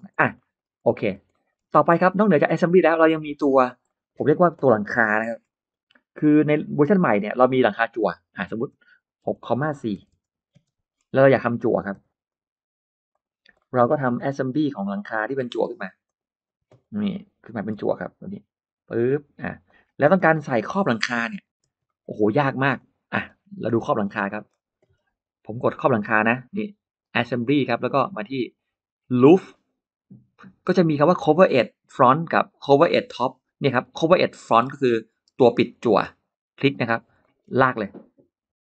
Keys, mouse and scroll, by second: 0.2 middle click, 0.7 middle click, 1.1 middle click, 1.6 middle click, 2.0 middle click, 2.9 space, 3.1 click, 3.9 middle click, 4.5-5.6 scroll up 3, 5.1 Delete, 5.7 middle click, 6.5 scroll up 1, 6.8 middle click, 7.1 r, 7.7 click, 9.1 6, 9.8 4, 10.1 Return, 10.1 4, 10.4 space, 10.7 middle click, 10.9-11.3 scroll down 1, 11.3 middle click, 11.8 p, 12.1 click, 13.0 click, 13.4 middle click, 13.4 scroll up 1, 13.6 middle click, 13.9 l, 14.8 click, 15.9 click, 16.4 space, 16.7 middle click, 16.7 space, 17.6 m, 18.0 click, 19.5 click, 19.9 space, 20.1 click, 20.4 click, 20.5 click, 20.6 space, 20.7 click, 21.1 middle click, 21.1-21.4 scroll down 1, 21.4 g, 21.6 middle click, 21.6 scroll up 1, 21.9 scroll down 1, 22.6 click, 23.0-23.7 scroll down 2, 23.6 click, 23.9-24.2 scroll up 2, 24.1 middle click, 24.7-25.4 scroll up 4, 27.2 click, 29.3 click, 34.7 click, 35.8 click, 37.0 middle click.